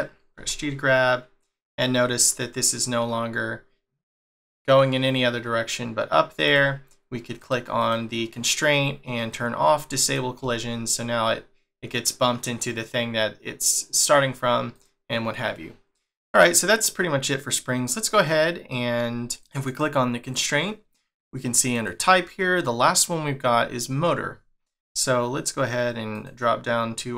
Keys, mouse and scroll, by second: 0.4 g, 7.4 click, 7.8 click, 9.2 click, 10.0 click, 10.4 g, 17.9 click, 19.3 click, 19.7 click, 20.2 click, 21.7 click, 26.2 click.